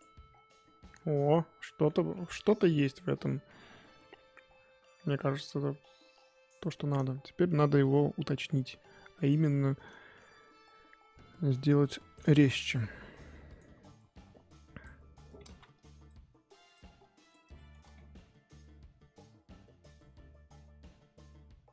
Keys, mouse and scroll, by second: 0.3-0.8 scroll down 10, 0.8-1.9 middle drag, 1.9-3.1 scroll up 7, 3.1 KP_1, 3.5 KP_3, 4.1-4.9 scroll up 3, 4.9-5.3 scroll down 5, 5.6-6.7 scroll up 8, 6.7-9.3 shift+middle drag, 9.3 click, 9.4-9.9 scroll up 2, 9.9-11.7 shift+middle drag, 11.7 click, 12.3 ctrl+z, 14.5 click, 15.4 ctrl+z, 15.7-17.5 drag, 17.5-18.5 shift+middle drag, 18.5-21.7 drag.